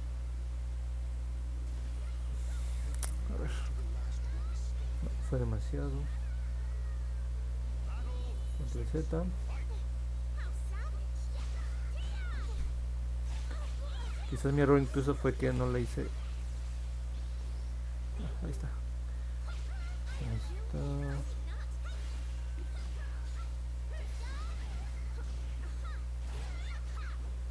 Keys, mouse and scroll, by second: 3.0 middle click, 3.0-3.5 scroll down 2, 3.3 middle click, 4.4 middle click, 4.8 middle click, 5.4 ctrl+z, 7.8 ctrl+z, 9.2 ctrl+z, 10.4 ctrl+z, 11.8 ctrl+z, 20.5 click, 23.3 ctrl+z, 26.8 click.